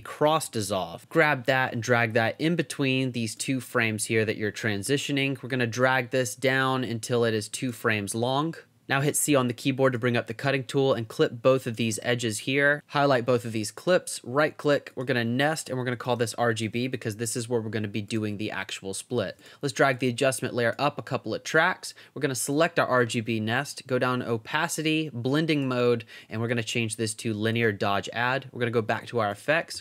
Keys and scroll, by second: 0.0-0.4 typing, 9.3 c, 11.9 v, 15.5-16.7 typing, 29.3-29.8 typing.